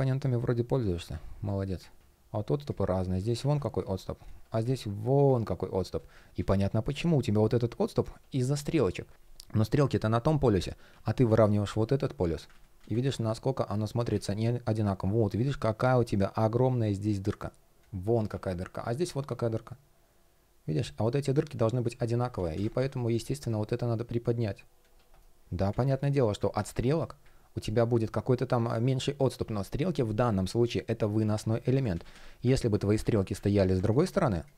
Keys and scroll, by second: 0.4 shift+o, 1.6 shift+o, 3.1 super+z, 6.0 super+z, 9.1 super+z, 12.2 super+z, 13.8 super+z, 22.0 super+z, 24.8 shift+p, 31.6 super+z, 32.2 super+z, 32.7 super+z, 33.0 super+z.